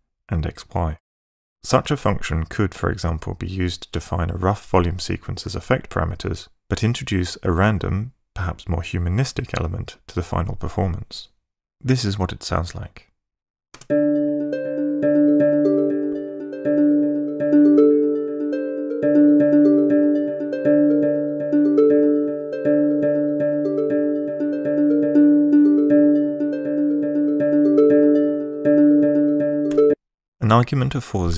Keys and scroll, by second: 13.2 ↺, 13.8 space, 29.7 space.